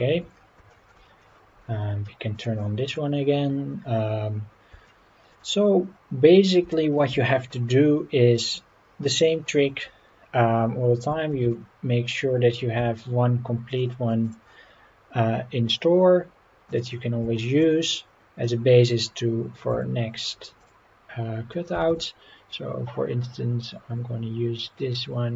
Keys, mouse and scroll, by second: 0.1 Tab, 0.7 shift+middle click, 2.3 click, 2.8 click, 3.2 scroll up 3, 4.0-4.3 scroll up 2, 4.3 scroll down 1, 4.9-5.3 shift+middle drag, 6.3 scroll down 1, 6.7 shift+middle drag, 11.4 shift+d, 12.8 x, 13.7 click, 16.7 click, 17.3 shift+middle drag, 17.8 click, 18.5-18.9 scroll up 3, 19.0-19.5 scroll down 1, 19.7 Tab, 20.6 click, 21.7 g, 22.0 g.